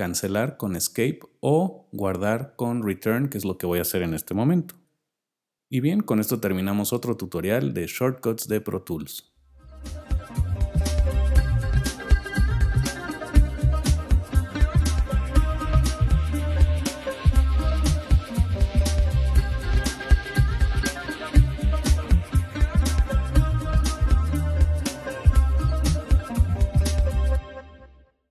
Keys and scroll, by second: 4.8 Return.